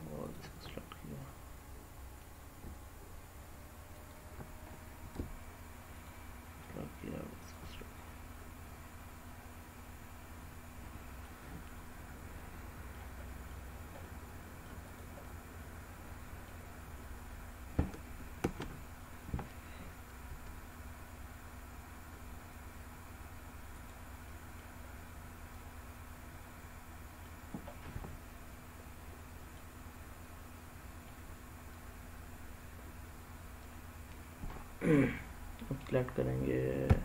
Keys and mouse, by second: 0.6-1.9 middle drag, 2.2-3.9 Return, 3.6 click, 5.7 shift+click, 7.1 shift+click, 7.8-10.9 middle drag, 12.2 middle click, 13.1 middle click, 14.0 middle click, 14.7 click, 15.0-16.3 middle drag, 18.3 ctrl+z, 20.1 g, 23.6 click, 24.1 middle click, 25.4-27.1 middle drag, 27.6-29.4 middle drag, 30.2 middle click, 36.7 Tab.